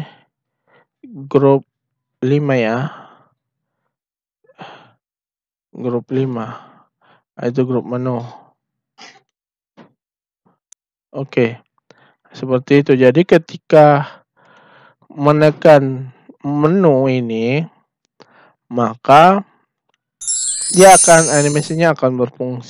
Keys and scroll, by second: 3.5 1.